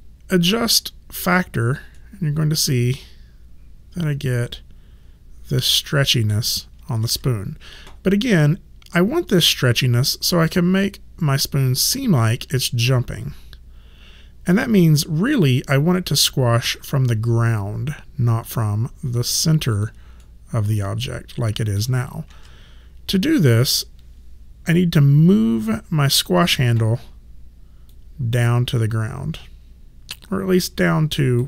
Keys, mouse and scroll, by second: 2.0 middle click, 7.0 ctrl+z, 19.3 click, 20.2 middle click, 22.3 ctrl+z, 26.1 click.